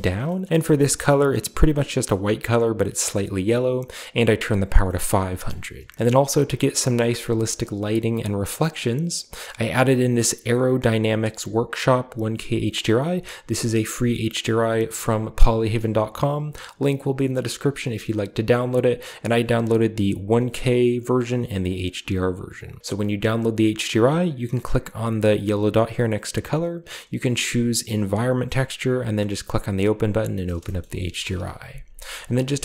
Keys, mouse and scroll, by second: 0.6-1.4 drag, 5.5-5.9 middle drag, 7.7 click, 8.6 click, 18.5 click, 19.1 click, 20.1 click, 21.1 click, 21.5-30.3 drag, 30.4-31.4 shift+middle drag, 31.4 KP_0, 31.9 shift+middle click.